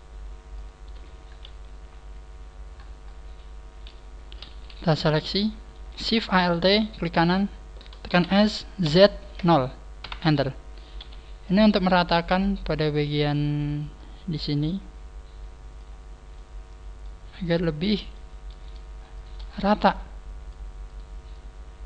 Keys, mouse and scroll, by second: 0.6 click, 1.2 scroll down 3, 1.3 KP_3, 1.9-2.3 scroll down 1, 2.5 scroll down 1, 3.4 click, 4.4 scroll up 1, 4.4 a, 4.9 a, 5.3 middle click, 5.3 a, 6.9 alt+shift+right click, 8.1 s, 10.9 KP_3, 11.7-12.6 scroll down 3, 12.7 click, 13.9 click, 16.3 middle click, 17.7 middle click, 18.5 right click, 19.1 shift+right click, 19.4 scroll up 4, 19.9 click, 20.8 shift+right click, 21.3 click.